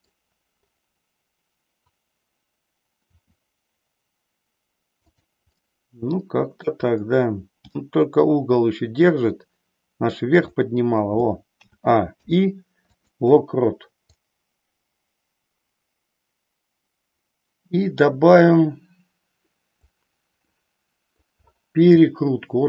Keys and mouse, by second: 3.1 r, 5.2 click, 5.6-6.7 middle drag, 7.7 g, 10.5 click, 11.6 a, 12.1 i, 14.2-19.9 drag, 20.5 middle click, 21.9 shift+middle click.